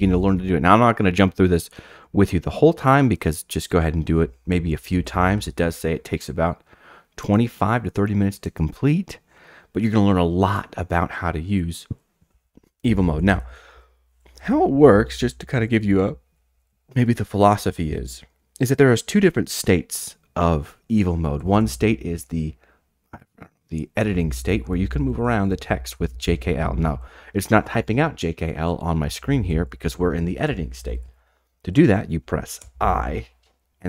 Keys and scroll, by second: 4.7 j, 4.9 j, 12.2-19.1 typing, 21.2-22.3 typing, 24.0-27.5 typing, 29.0-30.9 typing, 32.6 typing.